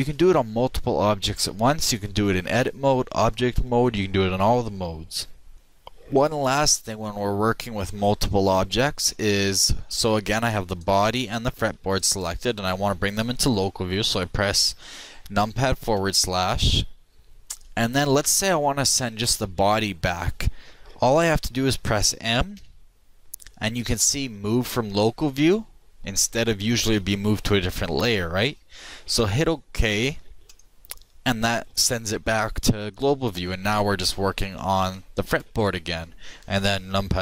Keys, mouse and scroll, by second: 9.0-10.6 middle drag, 10.6-14.4 right drag, 15.9 KP_Divide, 19.2-21.1 middle drag, 22.5 m, 34.7 shift+middle click.